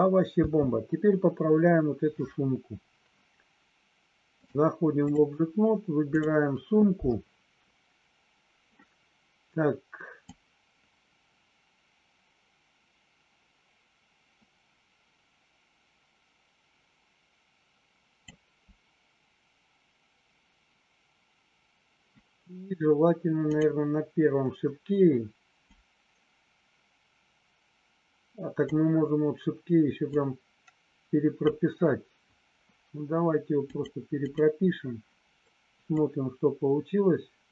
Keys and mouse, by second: 0.5 space, 4.4 click, 6.0 click, 10.3-18.3 drag, 23.4 click, 25.8-28.6 drag, 30.0-31.6 drag, 33.6 click, 34.2 click, 35.9-37.5 drag.